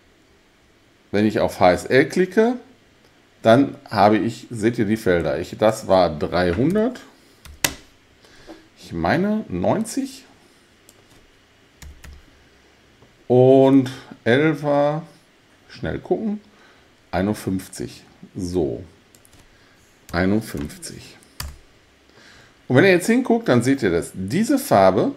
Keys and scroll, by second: 6.7 3, 7.5 0, 7.7 0, 11.6-12.6 typing, 20.1 5, 20.6 1, 21.4 Return.